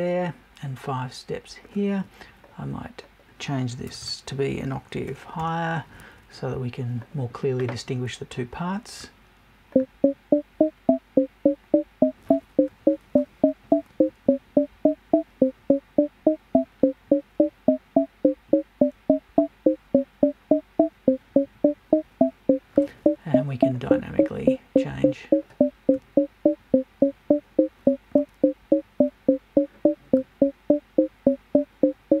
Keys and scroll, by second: 3.8 BackSpace.